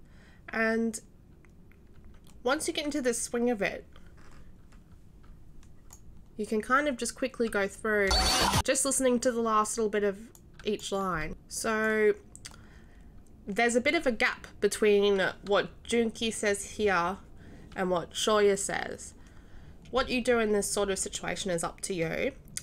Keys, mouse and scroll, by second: 8.1 d, 10.3 right click, 11.8-22.6 right drag.